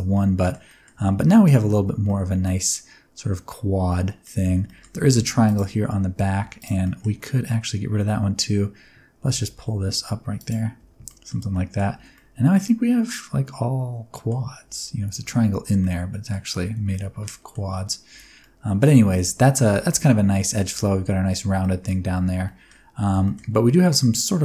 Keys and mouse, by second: 0.2 middle click, 0.7 middle click, 0.9 Tab, 1.1 middle click, 1.7 Tab, 2.0 middle click, 3.9 middle click, 4.4 alt+z, 4.7 middle click, 5.0 alt+z, 5.4 click, 6.4 2, 6.6 click, 6.8 middle click, 9.2 g, 9.3 g, 10.4 click, 10.8 Tab, 11.1 middle click, 11.4 Tab, 11.5 middle click, 12.0 alt+z, 12.1-14.3 middle drag, 14.6 alt+z, 15.2 alt+z, 15.8 middle click, 16.6 alt+z, 16.9 middle click, 18.1 3, 18.4 middle click, 19.1 shift+middle click, 19.8 middle click, 20.0 middle click, 20.7 Tab, 21.6 middle click, 22.1 Tab, 22.4 middle click, 22.9 alt+z, 23.2 shift+middle click, 23.5 alt+z, 23.6-24.4 middle drag.